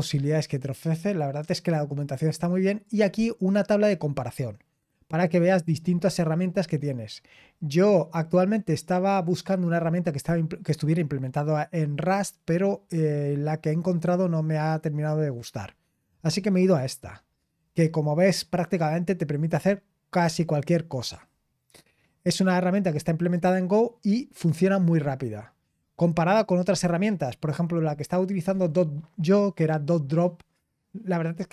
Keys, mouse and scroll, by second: 2.8 click, 4.5-6.7 scroll down 2, 6.7-7.3 scroll down 1, 7.4-12.7 scroll up 2, 12.7-16.3 scroll down 4, 16.3-17.6 scroll up 2, 17.6-24.0 scroll down 4, 24.0-31.5 scroll up 3.